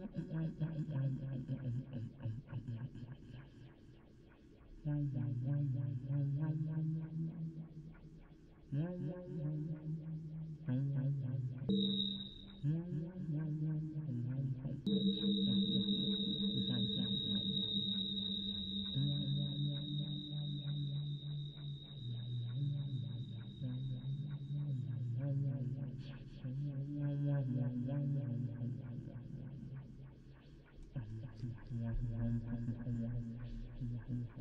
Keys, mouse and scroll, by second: 1.9-2.4 d, 4.5 d, 4.6 d, 5.2-6.3 drag, 8.5 f, 10.3 click, 13.6-15.0 drag, 17.6-19.2 drag, 20.1-21.3 drag, 22.2-26.5 drag, 26.8-28.4 drag, 28.4-29.5 middle drag, 30.0 click, 31.2 middle click, 31.7 click, 32.1 middle click, 32.5 click, 32.7 middle click, 33.4 middle click, 33.8-34.4 drag.